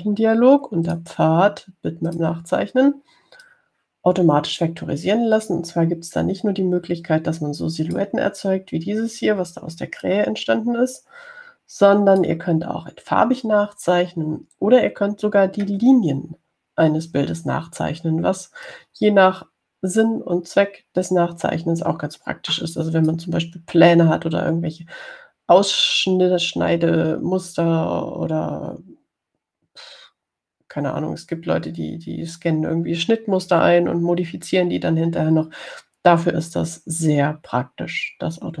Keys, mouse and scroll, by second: 2.1 click, 3.3 click, 4.7-7.0 drag, 7.5-9.4 drag, 11.3-13.7 drag, 20.0-24.6 drag.